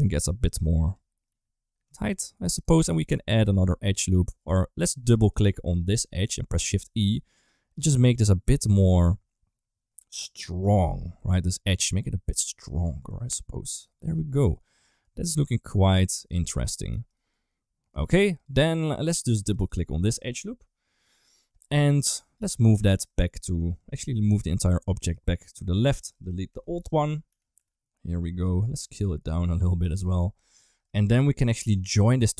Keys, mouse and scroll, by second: 0.5 click, 0.7 click, 1.1 s, 2.1 middle click, 2.6 shift+middle click, 2.8 middle click, 3.4 ctrl+r, 4.7 2, 5.0 click, 6.5 shift+e, 12.9 Tab, 13.0 middle click, 13.7 shift+middle click, 14.9 middle click, 15.8 middle click, 16.2 Tab, 16.8 3, 17.2 middle click, 17.9 2, 18.0 click, 18.6 middle click, 19.4 click, 20.5 KP_1, 21.8 shift+middle click, 23.6 Tab, 24.0 g, 26.4 Delete, 27.2 g, 28.7 s, 29.7 g, 30.5 shift+middle click, 30.8 middle click, 31.5 shift+middle click, 31.9 click, 32.2 middle click.